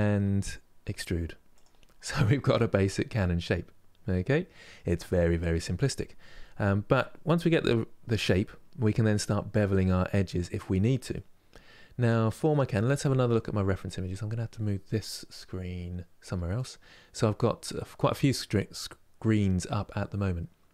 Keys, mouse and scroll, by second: 1.6 scroll down 2, 2.5-7.7 middle drag, 10.8-13.8 middle drag.